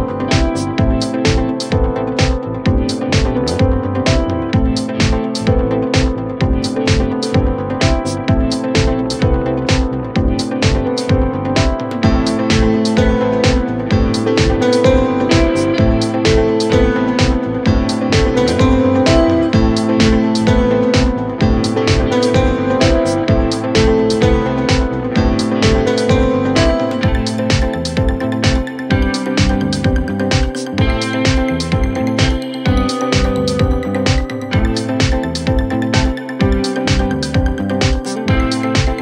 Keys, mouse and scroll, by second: 5.0 Escape, 8.4 space, 8.8 scroll down 4, 9.6 Delete, 9.8 scroll down 1, 10.0-10.4 scroll up 11, 10.6-11.1 scroll down 2, 11.1 middle click, 11.6 double click, 12.2 Delete, 12.4 Delete, 13.0 scroll down 2, 13.2 middle click, 13.5-14.1 scroll up 7, 14.4 scroll down 1, 14.6 middle click, 14.9 space, 15.8 m, 16.9 shift+click, 17.2 shift+click, 18.8-19.9 typing, 20.2 double click, 20.4 shift+click, 20.5 shift+double click, 20.7 shift+click, 21.0-22.8 typing, 23.4 scroll up 3, 23.6 middle click, 25.5 shift+click, 25.7 shift+middle click, 26.1 shift+click, 26.8 scroll up 3, 26.9 middle click, 27.3 scroll up 1, 28.1 Delete, 28.7 Delete, 29.3 middle click, 29.8 double click, 30.4 shift+click, 30.7 shift+click, 31.1 shift+middle click, 31.4 scroll up 4, 31.6 shift+click, 32.5 double click, 32.7 middle click, 33.1 shift+click, 33.5 Delete, 33.9 double click, 34.3 shift+click, 35.0 shift+click, 35.7 shift+click, 36.1 shift+l, 36.3 scroll down 5, 36.5 middle click, 36.9 middle click, 37.2 scroll down 3, 37.3 middle click, 37.6 double click.